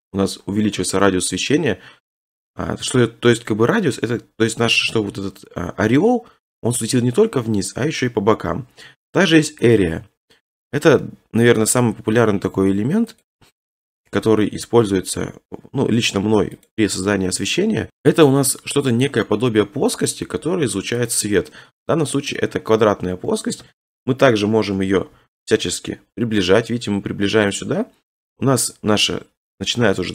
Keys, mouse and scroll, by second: 2.0 ctrl+z, 2.0 middle click, 2.1 middle click, 2.3 middle click, 3.3 scroll, 9.8 click, 10.2-11.1 scroll, 12.2 scroll, 12.3 s, 13.3 click, 13.8 scroll, 14.5-14.9 scroll, 14.9 s, 16.7 click, 17.0 scroll, 17.9 scroll, 18.4 scroll, 20.1 middle click, 20.3 s, 21.1 click, 21.3 middle click, 22.3 middle click, 23.6 1, 24.7 3, 25.1 g, 27.6 click, 27.8-28.2 scroll, 29.8 middle click.